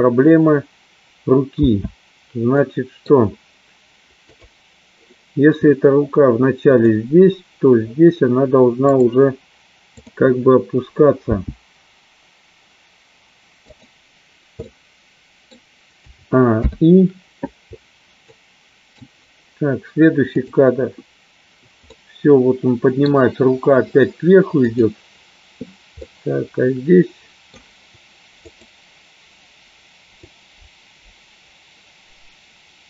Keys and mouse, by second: 2.5 space, 2.8 middle click, 5.0 click, 7.3 click, 10.0 click, 11.7 g, 14.8 middle click, 17.0 i, 18.4 middle click, 20.9 click, 22.0-23.1 middle drag, 25.3 click, 26.2-27.8 middle drag, 29.2 click, 30.9-32.8 drag.